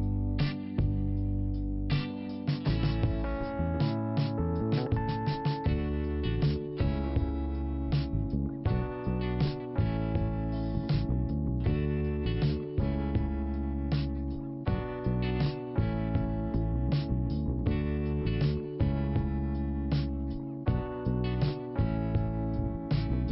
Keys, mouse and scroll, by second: 0.6 click, 0.6 click, 1.3 click, 1.3 click, 2.1 click, 5.3 click, 5.4 click, 5.8 scroll down 2, 7.6 middle click, 8.5 click, 13.3 click, 14.5-15.5 scroll up 1, 15.5 click, 16.9 click, 19.0 click, 20.6 click.